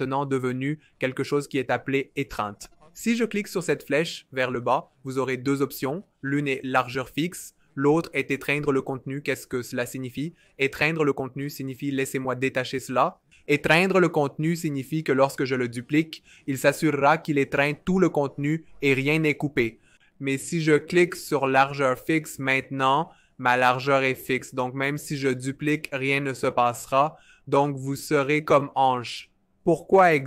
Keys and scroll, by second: 13.0 alt+super+b, 15.4 super+d, 15.7 super+d, 16.0 super+d, 25.9 super+d, 26.2 super+d, 26.6 super+d.